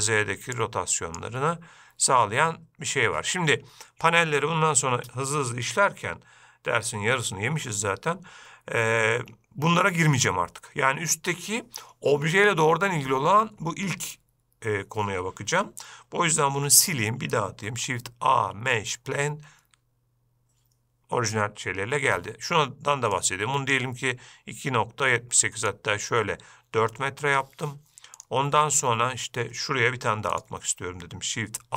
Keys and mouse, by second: 0.8 click, 16.8 x, 17.9 shift+a, 23.3 click, 25.9 click, 30.5-30.8 shift+middle drag.